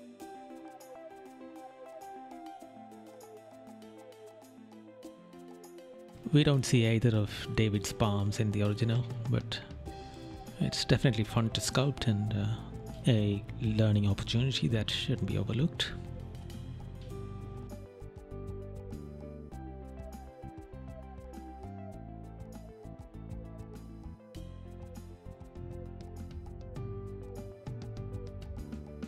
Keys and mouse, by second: 0.3 right click, 2.8 right click, 5.5 right click, 11.7 right click, 15.6 right click, 17.7 right click, 20.8 right click, 22.5 right click, 23.1 right click, 24.6 right click, 25.2 right click, 26.6 right click, 28.3 right click.